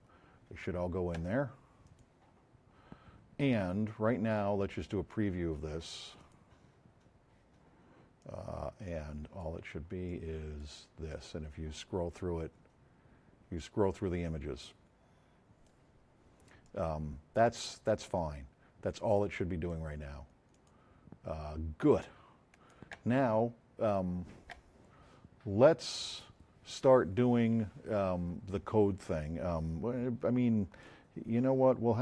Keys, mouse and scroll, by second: 1.8 click, 4.7-5.6 middle drag, 6.1 click, 8.2-9.1 drag, 10.0-10.5 drag, 22.0 click, 30.8-31.9 drag.